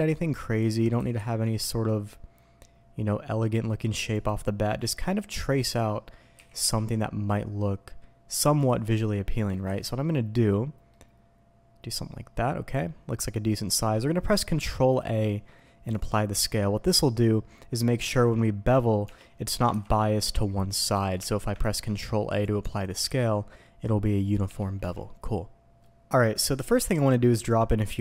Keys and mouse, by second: 0.6 ctrl+click, 0.9 s, 1.1 x, 4.1 ctrl+click, 4.7-5.8 drag, 6.3 s, 6.6 z, 8.5 ctrl+click, 10.9-12.7 middle drag, 13.3 middle drag, 14.9 ctrl+a, 18.1 ctrl+z, 18.6 click, 19.0 Tab, 19.4 click, 19.7 ctrl+b, 20.9 Escape, 21.1 Tab, 21.6 ctrl+a, 22.6 Tab, 23.0 ctrl+b, 24.4 Escape, 24.8 Tab, 25.8-26.1 drag, 26.3-26.7 drag, 26.7 Tab, 27.3 drag, 27.9 alt+a.